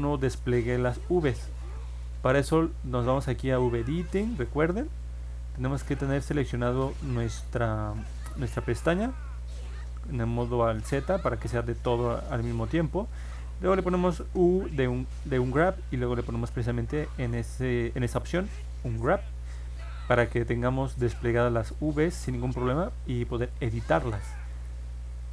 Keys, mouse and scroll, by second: 3.4 click, 4.5 middle click, 4.8 middle click, 5.9 click, 7.4 middle click, 10.3 alt+z, 11.5 click, 14.2 u, 21.8 click, 22.2 middle click, 22.6 middle click, 22.7-23.2 scroll down 1, 23.4 middle click, 25.0 ctrl+Tab.